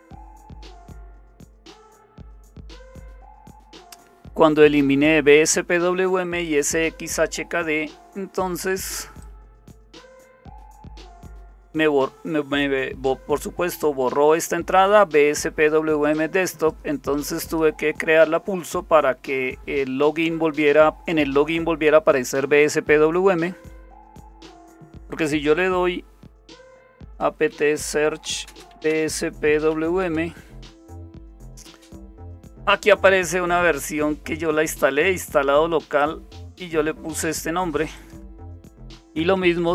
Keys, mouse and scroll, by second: 0.0-3.5 typing, 9.2-11.6 drag, 16.2 click, 17.5 click, 26.3-30.2 typing, 36.0-37.4 drag, 38.0 click, 39.0 Up, 39.6-39.7 typing.